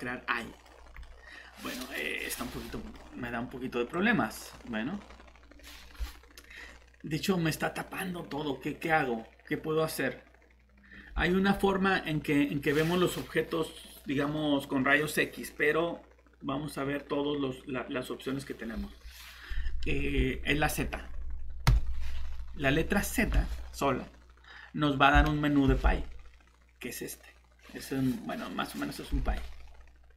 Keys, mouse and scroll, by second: 0.4 middle click, 0.7 scroll down 1, 1.0 middle click, 1.8 scroll up 1, 2.2 middle click, 2.4 typing, 3.9 click, 4.9-6.4 scroll down 1, 6.5-11.8 scroll up 1, 21.7 z, 23.2 Escape, 25.1 z.